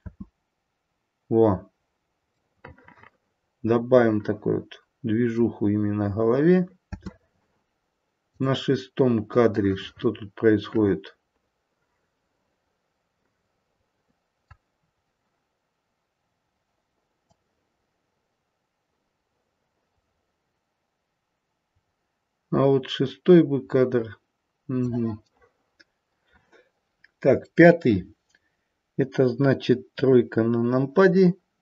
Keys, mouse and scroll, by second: 2.7 middle click, 6.9 space, 8.2 click, 9.5 middle click, 14.3 middle click, 14.8-17.3 scroll down 1, 17.3 click, 25.2 middle click, 26.7 middle click, 26.7 click, 27.4 middle click, 29.8 KP_3.